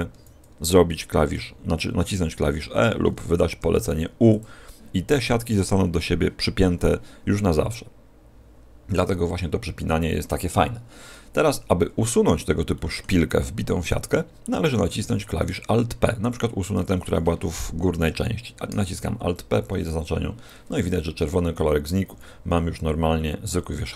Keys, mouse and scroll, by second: 0.0 a, 1.3 e, 3.5 u, 12.0-12.6 scroll up 1, 12.6 middle click, 12.6 scroll up 3, 13.7 right click, 14.4 middle click, 15.3 right click, 18.7 alt+p, 22.0 a, 23.4-23.9 scroll down 3.